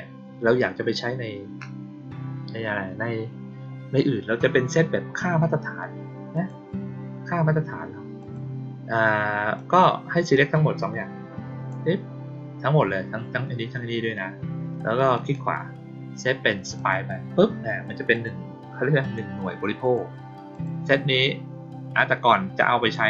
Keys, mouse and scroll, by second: 6.3 click, 8.1 click, 9.5 click, 10.3-11.6 drag, 15.1 right click, 16.7 click, 18.0 click, 18.9 click, 19.7 click, 20.4 click, 22.7 click, 22.9 click.